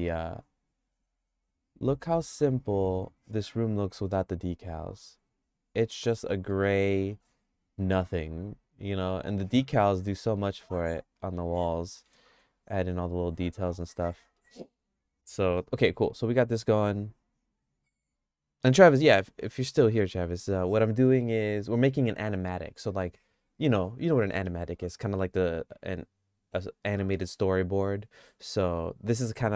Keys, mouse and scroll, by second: 1.0 click, 1.4 click, 5.2 click, 6.3 middle click, 6.7-9.2 shift+middle drag, 11.8 middle click, 14.4 middle click.